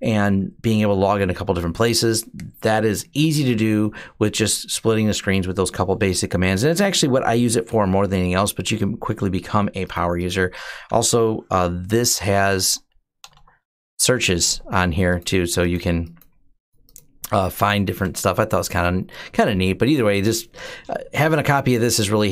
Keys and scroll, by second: 12.0-13.7 typing, 17.8-18.7 typing.